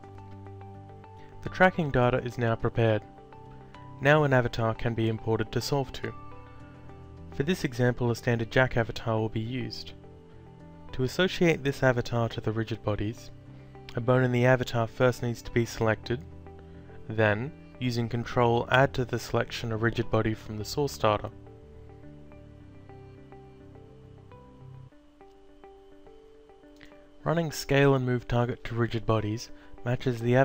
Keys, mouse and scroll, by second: 1.3 click, 5.8 click, 6.8 click, 8.6 click, 10.1 click, 11.0 alt+click, 19.8 click, 21.6 ctrl+click, 25.4 click, 29.5 click.